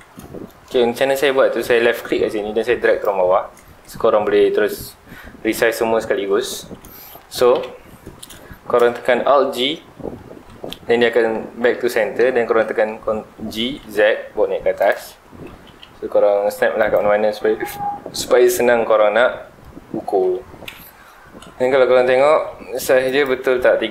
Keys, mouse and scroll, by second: 0.1 scroll down 2, 0.3-1.9 middle drag, 1.9-5.1 drag, 6.2 Escape, 6.5-6.9 scroll up 2, 6.9 middle click, 7.5 KP_7, 8.3 scroll down 2, 8.4-9.0 shift+middle drag, 9.0 scroll down 2, 9.0-10.3 middle drag, 10.3 alt+g, 11.1-11.7 middle drag, 11.7 scroll down 2, 11.9-13.6 middle drag, 13.6 g, 14.9 click, 15.1-15.4 scroll up 2, 15.4 g, 16.9 ctrl+click, 18.5 scroll down 1, 18.7-20.6 middle drag, 20.6 KP_7, 21.7-22.2 scroll up 1, 22.2 alt+a, 23.0 click.